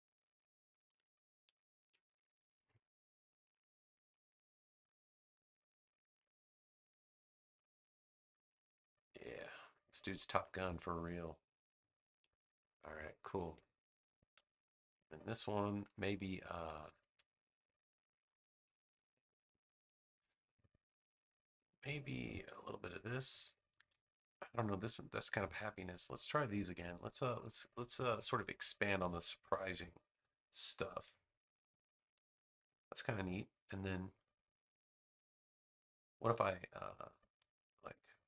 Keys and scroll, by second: 1.7 super+v, 13.0 space, 18.0 space, 21.4 space, 23.7 super+c, 26.6 super+c, 26.9 space, 29.5 super+v.